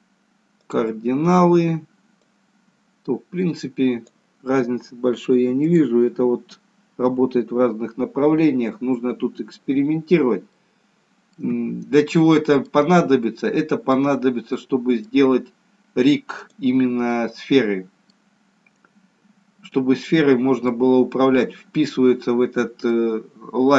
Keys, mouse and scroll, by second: 2.2 click, 10.2 scroll down 1, 10.5 middle click, 11.7-13.0 scroll up 3, 12.1 middle click, 13.0 scroll down 1, 13.3 middle click, 14.0-14.8 scroll down 1, 14.8 middle click, 14.8 scroll down 2, 17.1 middle click, 19.2-19.6 scroll up 1, 19.6 middle click, 22.9 middle click.